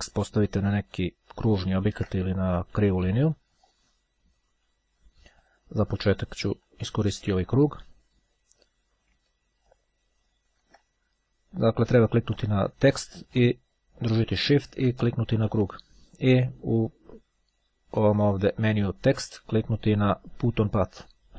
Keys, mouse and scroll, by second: 0.4-2.5 ctrl+drag, 3.8 click, 5.6 click, 9.9-11.2 ctrl+drag, 12.4 click, 15.0 shift+click, 17.5-19.3 drag, 20.9-21.3 drag.